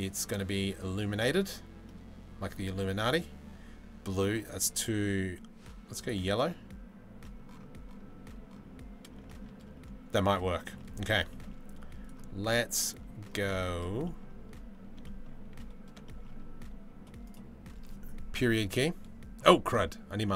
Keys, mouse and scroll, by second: 1.5 middle drag, 6.9 middle click, 10.3 shift+click, 11.7 right click, 12.5 middle click, 13.4 middle drag, 13.7 middle drag, 15.7 shift+middle drag, 16.9 click, 18.1 KP_Decimal, 19.1 middle drag, 20.0-20.3 middle drag.